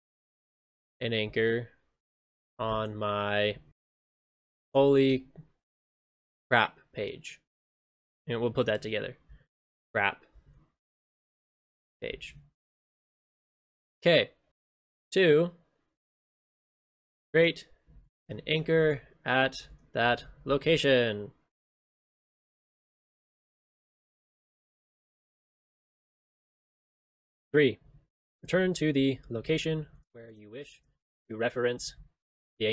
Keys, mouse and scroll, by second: 23.1 ctrl+i.